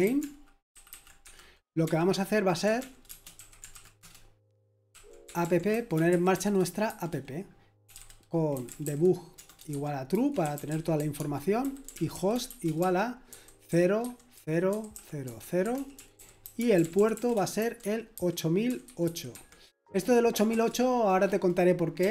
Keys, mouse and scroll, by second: 0.0-22.1 typing, 1.2 Escape.